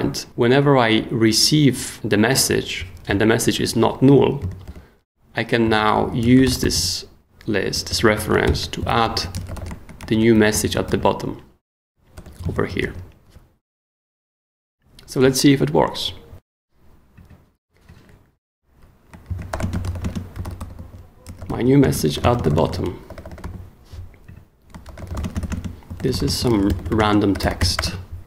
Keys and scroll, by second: 4.6 super+o, 5.3-10.8 typing, 10.9 super+s, 12.1 o, 12.8 super+s, 19.0-28.2 typing.